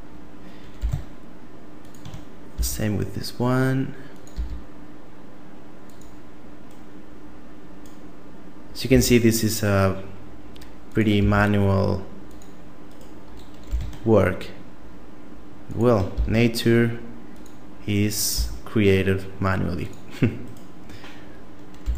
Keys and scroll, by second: 0.8 g, 2.6 e, 4.4 e, 8.9 e, 11.2 e, 13.7 g, 16.2 e, 18.4 e, 21.8 g.